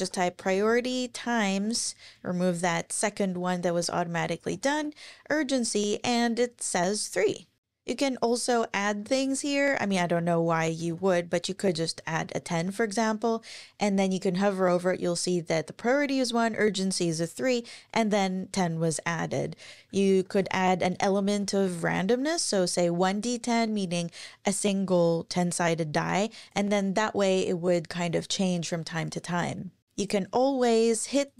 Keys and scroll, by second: 0.0-1.7 typing, 1.4 Right, 4.0-5.2 typing, 5.2 Page_Up, 9.0 Left, 9.8-11.5 typing, 20.1 Down, 20.4 super+Right, 20.8 super+Left, 21.4 super+Left, 22.4 Up.